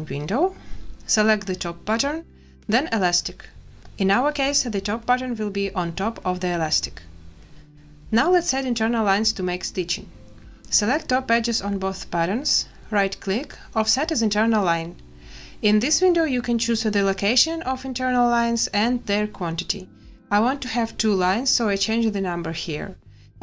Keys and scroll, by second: 7.4 a, 8.4 z, 21.5 2.